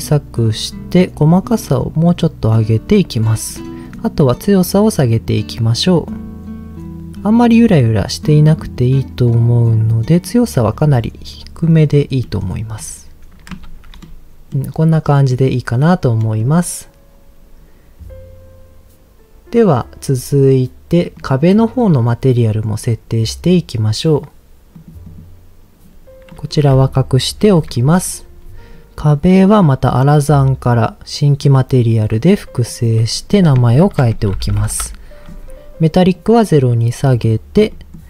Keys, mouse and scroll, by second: 1.2-3.5 drag, 4.2-10.2 drag, 11.3 middle click, 12.1 scroll up 1, 12.2 middle click, 12.7-13.2 scroll down 3, 13.7 ctrl+s, 14.0 middle click, 15.0 middle click, 16.2 middle click, 20.0-21.1 scroll down 2, 21.1 click, 21.1 scroll down 1, 21.7-22.5 scroll down 2, 22.1 middle click, 24.7 click, 25.0 click, 26.3 click, 27.3 h, 27.6 click, 28.0-28.4 scroll down 1, 28.6 scroll down 2, 28.8-30.3 drag, 31.4 click, 32.7 middle click, 33.3-34.8 drag, 34.5 l, 36.1 click, 37.0 middle click, 37.7 middle click.